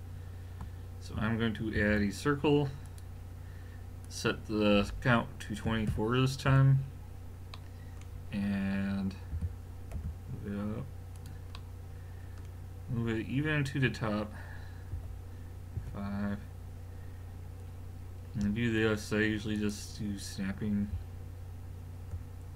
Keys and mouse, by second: 1.8 shift+a, 4.0 click, 7.6-9.4 middle drag, 9.3 g, 11.5-12.8 middle drag, 14.9 KP_3, 15.8 KP_5, 19.6 click.